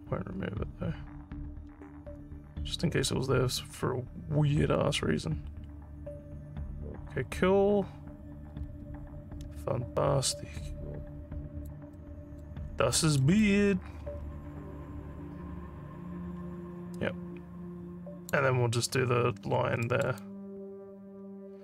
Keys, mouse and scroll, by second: 12.0 alt+middle click, 12.7 alt+scroll down 1, 13.0 alt+middle click, 13.5-18.3 alt+drag, 18.8 alt+middle click, 19.9 alt+middle click, 20.2-21.6 alt+drag.